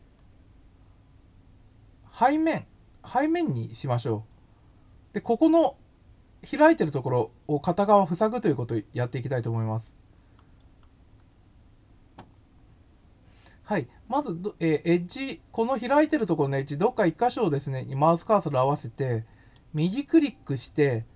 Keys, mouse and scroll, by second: 3.2 click, 9.7-10.7 scroll up 3, 19.6 right click.